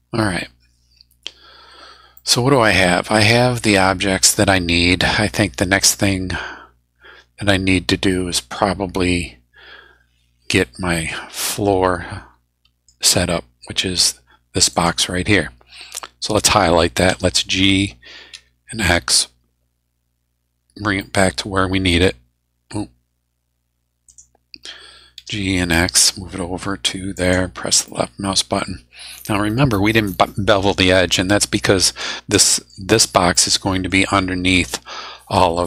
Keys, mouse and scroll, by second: 2.2-13.0 middle drag, 14.7 click, 17.1 g, 18.3 x, 21.0 middle click, 24.1 click, 25.2 g, 25.7 x, 27.2 click, 27.9-29.7 middle drag, 32.4 middle click, 33.3 middle click.